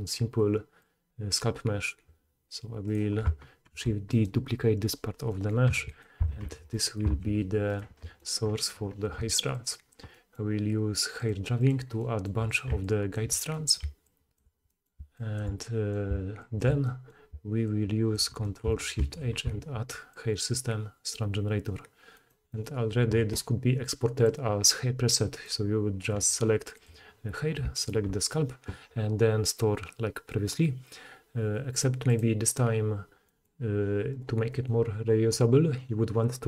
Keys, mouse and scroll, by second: 2.5 click, 3.0-6.7 middle drag, 3.7 shift+d, 5.6 p, 6.4 Tab, 6.7 click, 7.0-7.6 middle drag, 7.2 h, 7.6 click, 7.8-9.5 middle drag, 9.5-11.7 drag, 11.7-12.8 middle drag, 12.6-18.2 typing, 12.8-31.8 drag, 19.2 ctrl+shift+h, 27.8 shift+middle click, 27.8 shift+right click, 31.8-32.1 middle drag, 32.1-36.4 drag, 34.1 middle click, 34.1 right click.